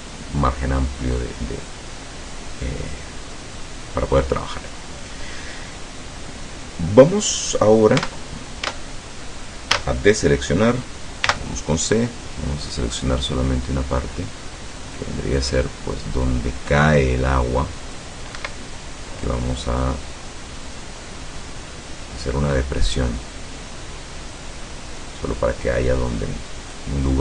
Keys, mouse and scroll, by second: 8.0 Tab, 8.7 Tab, 9.7 a, 11.3 c, 13.1-18.2 drag, 18.4 Escape, 19.3-27.0 drag.